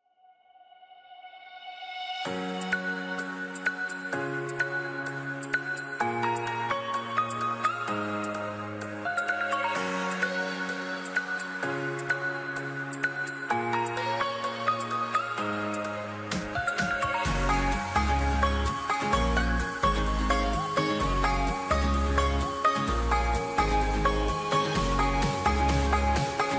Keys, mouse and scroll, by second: 1.3 click, 15.5 Return, 19.7 click, 24.4 Return, 25.8 click, 26.0 click.